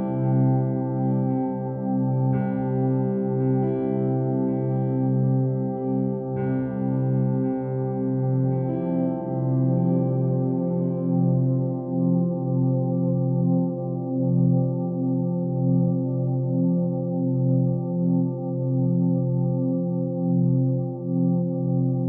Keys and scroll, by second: 20.8 ctrl+t.